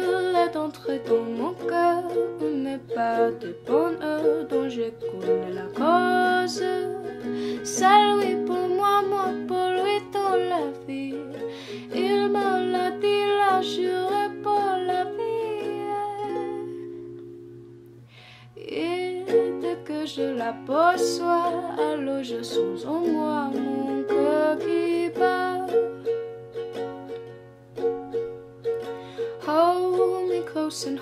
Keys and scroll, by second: 20.5 alt+[, 25.1-25.8 typing.